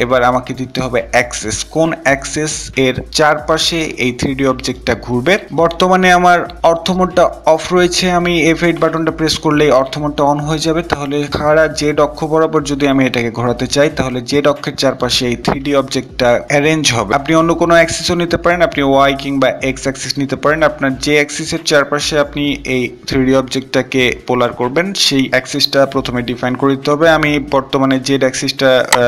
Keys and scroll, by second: 7.9 F8.